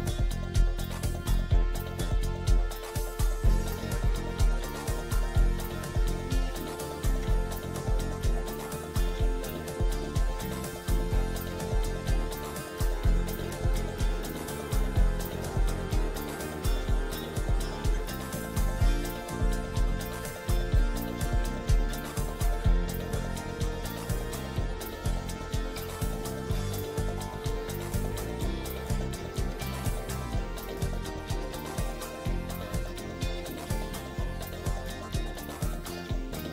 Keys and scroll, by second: 1.0 ctrl+g, 3.8 c, 4.4 Escape, 4.7 F2, 7.9 c, 8.2 Escape, 8.7 F4, 11.2 F2, 19.3 F4, 20.2 ctrl+r, 23.3 ctrl+g, 24.0 c, 24.4 Escape, 26.9 shift+F2, 27.2 F3, 30.4 Escape, 30.7 F4, 36.2 shift+F2.